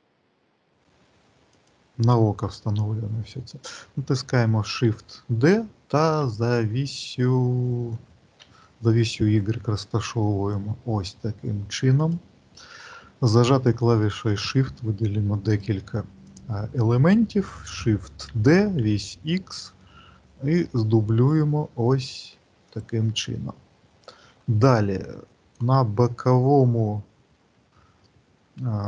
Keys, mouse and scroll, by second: 15.4 shift+click, 16.0 shift+click, 18.0 shift+d, 25.2 shift+click, 25.2 shift+middle click, 26.3 alt+middle click, 26.9-28.3 scroll down 5.